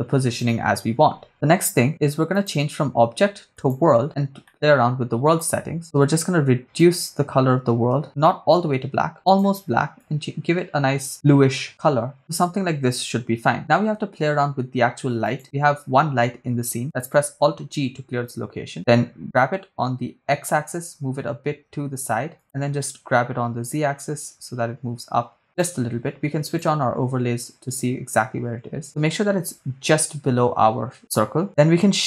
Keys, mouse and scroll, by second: 2.3-3.7 drag, 4.5-5.5 middle drag, 5.8 click, 15.2 click, 17.4 alt+g, 19.3 g, 20.4 x, 22.4 click, 23.0 g, 23.6 z, 25.5 click, 26.5 click.